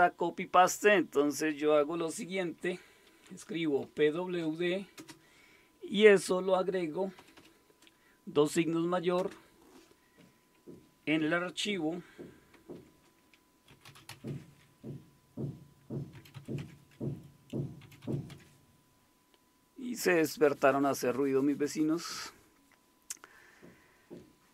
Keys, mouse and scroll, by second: 3.3-5.0 typing, 7.2 typing, 9.2 typing, 11.6 typing, 12.7-14.6 typing, 15.9-18.8 typing.